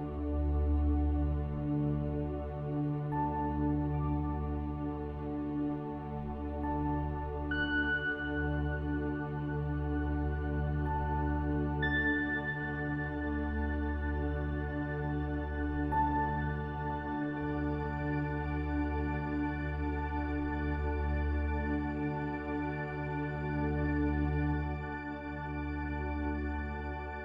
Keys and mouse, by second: 26.9 click.